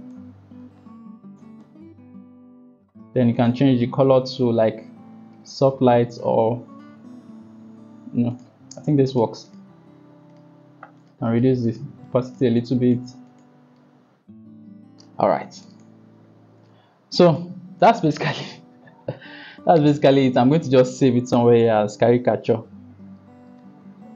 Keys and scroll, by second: 19.0 ctrl+s, 20.8 Caps_Lock, 20.9-23.8 typing, 24.0 Return.